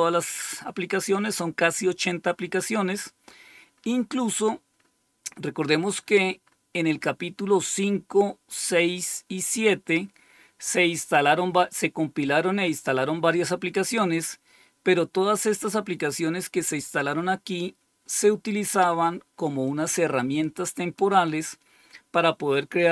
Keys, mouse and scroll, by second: 2.7 scroll up 1, 3.2-5.9 scroll up 10, 6.4 scroll up 2, 7.1-8.3 scroll up 1, 8.3-10.3 scroll down 2, 10.3-11.1 scroll up 2, 19.6-20.9 drag.